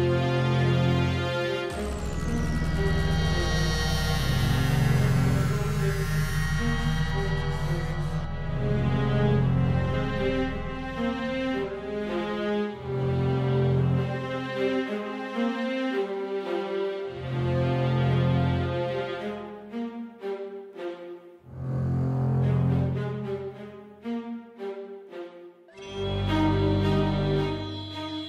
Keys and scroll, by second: 1.8 BackSpace, 10.3 Right, 10.5 Right, 10.6 Down, 10.7 Down, 11.8 super+Up, 12.0 super+Up, 12.0 super+Page_Up, 12.5 super+Up, 12.7 super+Up, 12.7 super+Up, 13.2 Right, 13.3 Right, 13.4 Down, 13.5 Down, 13.6 Down, 13.7 Down, 13.8 Down, 15.4 super+d, 20.7-23.3 typing, 22.4 Return, 24.2 Page_Down, 24.8 Page_Down, 25.0 Page_Down.